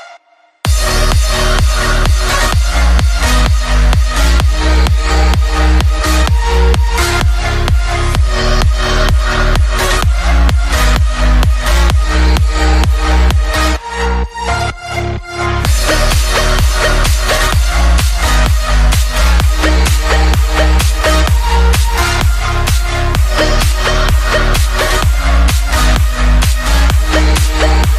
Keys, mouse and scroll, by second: 0.5 KP_3, 0.9 r, 1.4 g, 5.8 shift+z, 12.3-14.3 middle drag, 14.3 shift+z, 15.6-17.5 typing, 18.3-19.6 right drag, 18.6 r, 19.0 g, 22.6 shift+z.